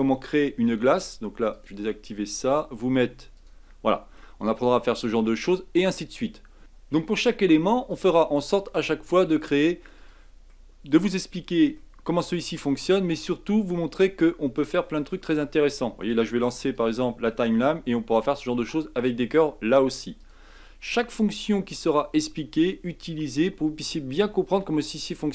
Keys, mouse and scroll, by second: 0.9 click, 1.5 click, 2.1-3.4 middle drag, 3.4 click, 3.9-4.4 middle drag, 4.4-4.8 scroll up 4, 4.8-6.6 middle drag, 7.9 click, 10.5-11.3 middle drag, 11.3-11.8 scroll down 4, 11.8-12.4 shift+middle drag, 12.4-14.2 scroll down 1, 14.2-14.6 scroll down 1, 14.6 click, 15.0-16.7 middle drag, 16.7 click, 20.2-21.7 drag, 21.9 click, 23.1 click, 24.2-25.2 drag, 25.2 scroll down 2.